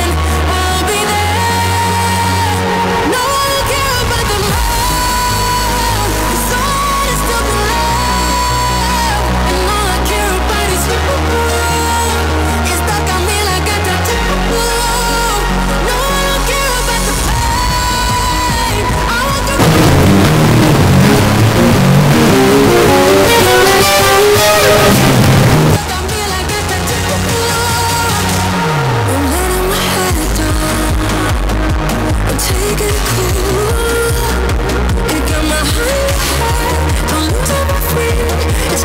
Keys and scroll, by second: 26.7 Page_Down.